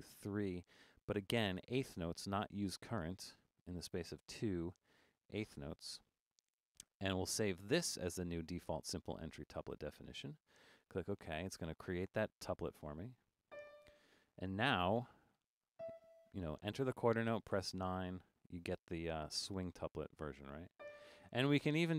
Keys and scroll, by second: 0.0 3, 4.2 2, 12.2 4, 14.8 5, 17.6-19.0 typing.